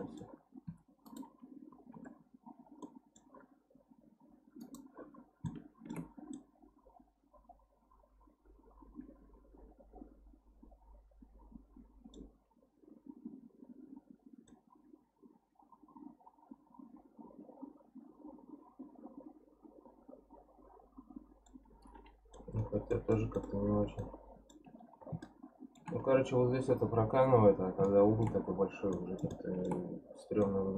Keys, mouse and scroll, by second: 0.6 2, 1.0 click, 1.9 KP_Decimal, 2.5 scroll down 2, 2.8-4.6 middle drag, 4.6 click, 5.1-5.5 scroll down 1, 5.5 shift+middle click, 6.1 scroll down 1, 6.3-9.3 middle drag, 12.4-14.5 scroll up 3, 14.5-17.6 middle drag, 21.7-22.3 scroll down 1, 22.3 middle click, 22.9-24.0 scroll up 1, 24.0 middle click, 24.7-25.2 scroll down 10, 25.2 shift+middle click, 25.9-27.2 scroll up 10, 27.2 scroll up 1, 27.3-27.8 scroll down 10, 27.8 shift+middle click, 28.4-28.9 scroll up 3, 28.9 middle click, 29.7-30.1 scroll up 1, 30.1-30.4 scroll down 2, 30.4-30.7 middle drag.